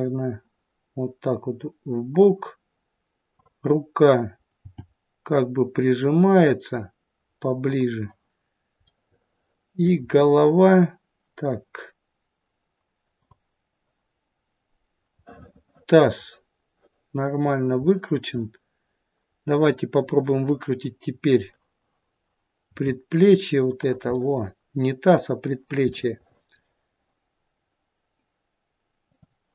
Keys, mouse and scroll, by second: 3.2 click, 4.5 g, 8.8 middle click, 9.9-11.8 scroll down 2, 13.0 click, 15.1 middle click, 16.2 middle click, 19.3 middle click, 22.7 r, 24.1 middle click, 25.9 middle click, 29.1 click.